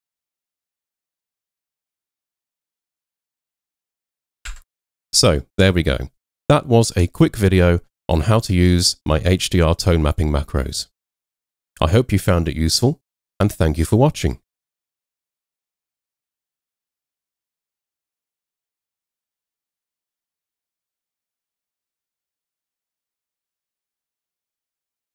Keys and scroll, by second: 4.5 Escape, 10.0 h.